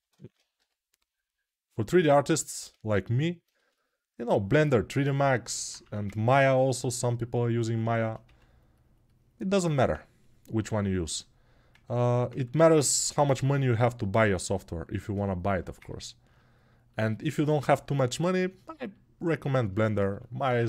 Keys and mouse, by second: 3.3 2, 12.7 g, 20.3 1.